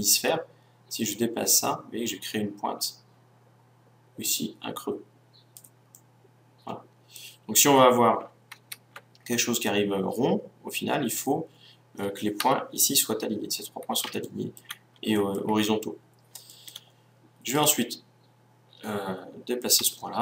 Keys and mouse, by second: 0.2-1.6 middle drag, 1.6-3.5 drag, 3.5 right click, 5.9-8.4 middle drag, 8.5 ctrl+z, 9.3-11.9 middle drag, 12.1-13.7 middle drag, 12.3 KP_1, 14.2 middle click, 15.3-17.5 middle drag, 17.5-19.4 right drag, 19.8 g.